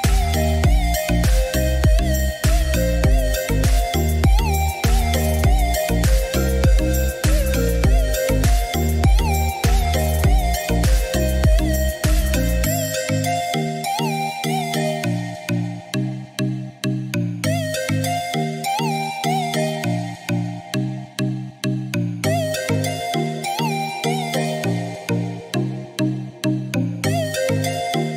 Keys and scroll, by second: 13.7 3, 13.8 0, 14.2 Return.